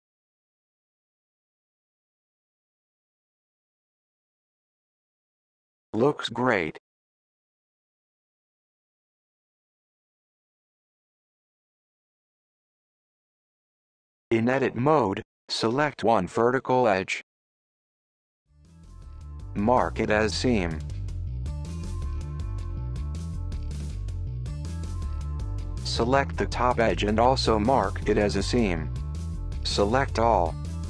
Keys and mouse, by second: 0.6-4.0 middle drag, 14.9-17.6 middle drag, 19.3-20.7 right drag, 21.7 a, 22.0 middle click, 24.5 click, 26.0 alt+click, 27.4 right click, 29.8 middle click, 30.3 a.